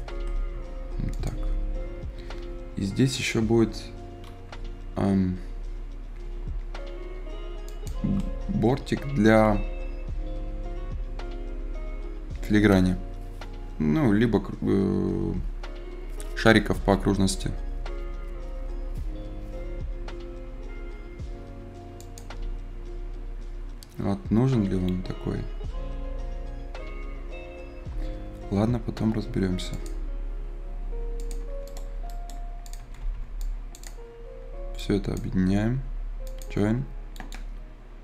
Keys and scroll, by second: 32.7 Escape.